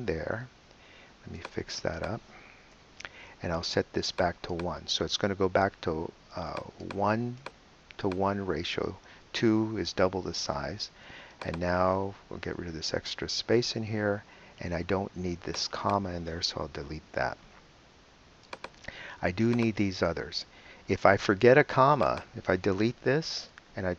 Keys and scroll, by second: 0.2 super+v, 2.7 BackSpace, 5.7 |, 12.6 BackSpace, 17.1 BackSpace, 23.4 BackSpace.